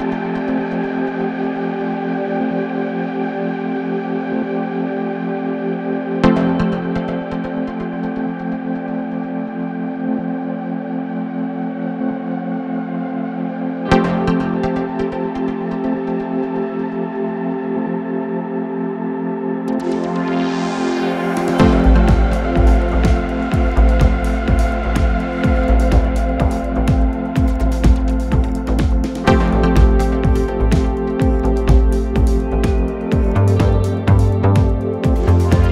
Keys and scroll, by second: 0.0 3, 0.3 ], 2.2 3, 3.5 3, 4.8 4, 6.6 3, 7.0 ], 8.0 ], 9.4 ], 10.7 4, 12.9 3, 18.0 4, 21.4 3, 21.8 ], 23.4 ], 24.4 ], 25.2 3, 25.6 4.